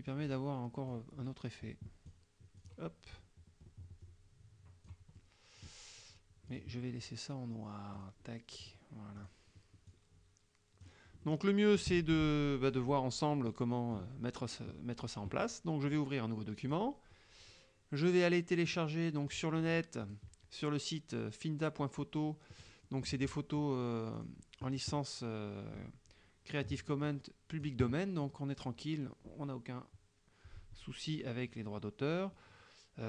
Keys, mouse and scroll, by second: 0.9-2.3 drag, 2.6 click, 3.2-5.1 drag, 5.3 middle click, 6.6 click, 8.0 click, 8.7 click, 9.3 click, 9.9 click, 11.3 middle click, 13.5 middle click, 16.7 click, 18.7 click, 20.1 click, 22.8 scroll up 1, 24.2 click, 27.1 click, 28.6 click, 31.2-31.6 scroll down 1.